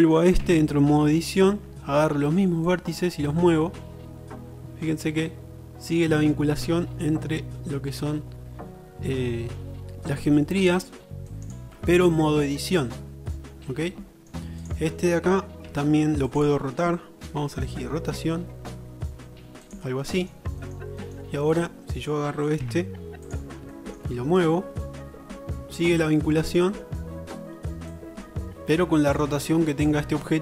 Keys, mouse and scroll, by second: 0.5 Tab, 1.1-2.7 shift+middle drag, 2.7-5.6 drag, 11.7-13.1 middle drag, 13.5 middle click, 15.9 Tab, 16.3 click, 17.5 r, 20.5-20.9 shift+middle drag, 22.0 click, 22.7 Tab, 22.7-23.3 middle drag, 23.3 click, 23.5-24.5 shift+middle drag, 26.3 shift+middle click.